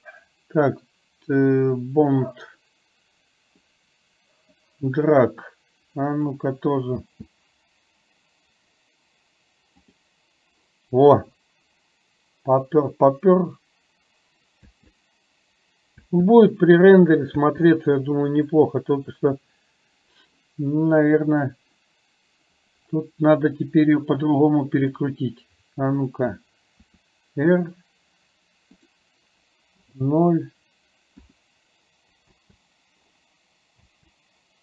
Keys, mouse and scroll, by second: 2.3-3.7 drag, 4.7-6.3 drag, 7.0 space, 9.8 click, 14.7 space, 16.1 space, 17.4 space, 19.0 click, 21.4 drag, 24.9 click, 27.0 r, 29.9 KP_0, 31.4 KP_0, 32.3 space, 34.0 space.